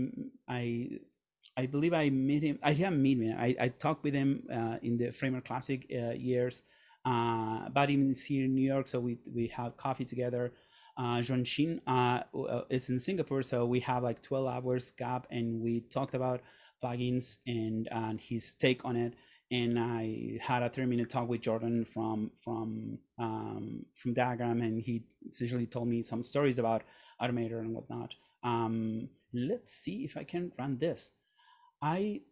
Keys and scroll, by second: 27.8 Right.